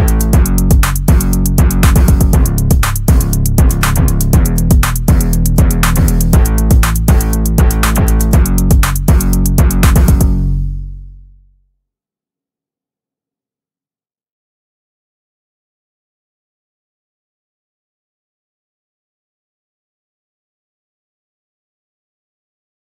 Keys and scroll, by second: 1.7 Right.